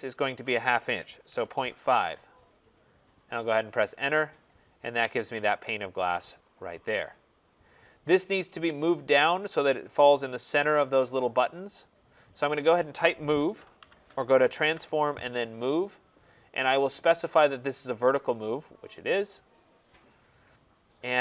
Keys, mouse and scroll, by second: 0.9-1.9 typing, 3.7 Return, 4.7 scroll, 5.3-6.0 scroll, 6.1 click, 7.4-7.8 scroll, 13.0-14.4 typing, 14.6 Return, 18.6-21.2 drag.